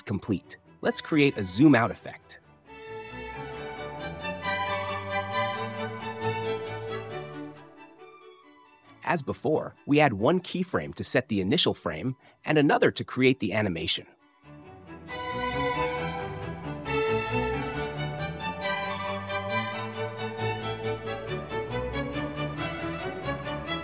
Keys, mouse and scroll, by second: 2.8 right click, 4.4 click, 6.2 click, 14.0 click, 17.3 click, 20.5 click, 21.6 typing, 22.9 typing, 23.4 Return.